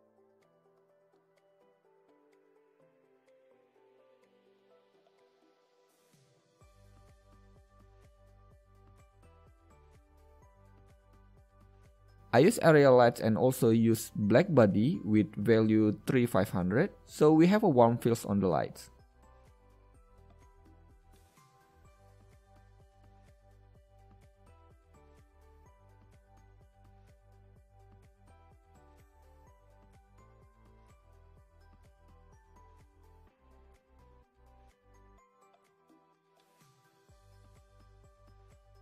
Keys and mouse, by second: 0.5-1.2 middle drag, 1.5 g, 3.4 click, 3.5 KP_6, 4.0 KP_7, 5.0-6.5 middle drag, 7.1-9.0 drag, 12.1 middle click, 14.4-16.3 drag, 17.8-19.3 drag, 19.3 KP_0, 20.8-22.5 drag, 23.3-23.7 middle drag, 24.5 KP_1, 27.9 KP_3, 28.0 KP_3, 29.8 shift+d, 31.3 middle click, 31.5-31.9 middle drag, 32.9 r, 35.3 click, 35.4-36.0 middle drag, 36.4 g, 38.0-38.3 middle drag, 38.6 KP_1.